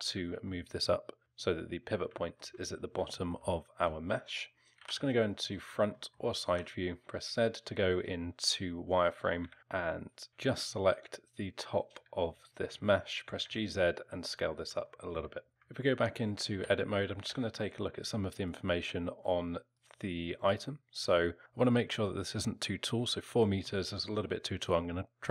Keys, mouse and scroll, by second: 0.5 alt+middle click, 1.2 alt+middle click, 2.1 alt+middle click, 3.1 alt+middle click, 4.8 KP_1, 5.5-6.0 scroll up 3, 6.0 middle click, 6.5 z, 9.4 b, 10.3 a, 12.3-12.7 scroll down 3, 12.7 middle click, 13.2 g, 14.9 alt+middle click, 15.5 ctrl+z, 15.5 Tab, 15.5 alt+middle click, 15.5 s, 16.6 n, 17.2 n, 18.5 click, 19.7 click, 20.5 click, 23.7 alt+middle click.